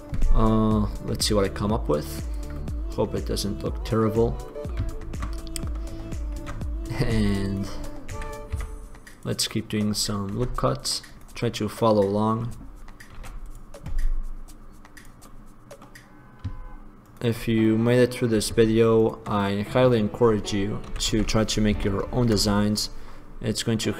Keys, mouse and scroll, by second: 3.2-4.4 middle drag, 5.9 middle click, 6.6 ctrl+r, 7.6 click, 8.3 s, 9.8 middle click, 10.6 ctrl+r, 13.4 ctrl+r, 15.4 middle click, 17.2 click, 19.2 click, 21.0 s.